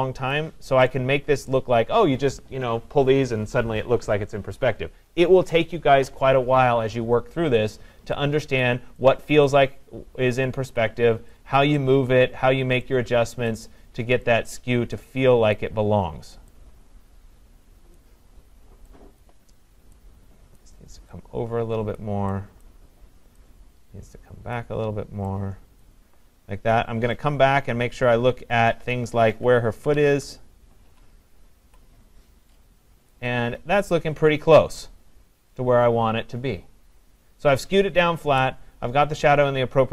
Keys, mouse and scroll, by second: 0.3 click, 1.5 click, 1.5 click, 8.6 click, 9.5 click, 10.8 click, 11.8 click, 13.5 click, 14.5 click, 15.5 click, 17.9 click, 22.7 click, 24.5 click, 25.8 click, 28.9 click, 30.1 Up, 30.9 Down, 31.7 Left, 34.0 click.